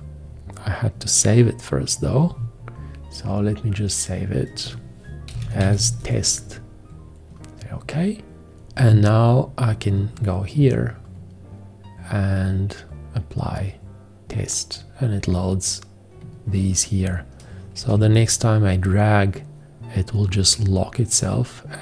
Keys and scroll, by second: 5.3-5.7 typing, 17.9 g.